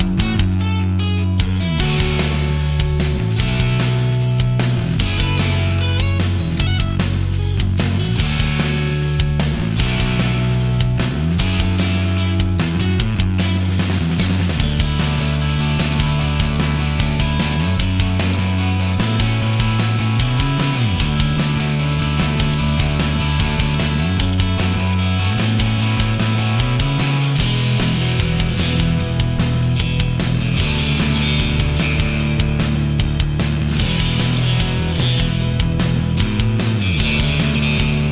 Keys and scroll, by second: 4.8 h.